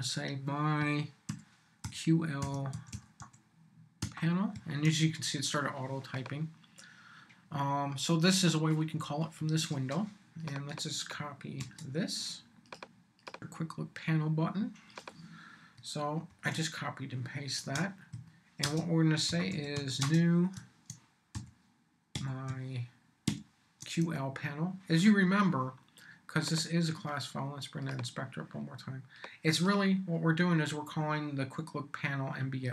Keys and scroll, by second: 1.3-4.0 typing, 4.5 Tab, 11.6 super+c, 16.3 super+v, 17.5 super+space, 18.1-20.2 typing, 21.3-23.2 typing, 24.0 shift+Tab.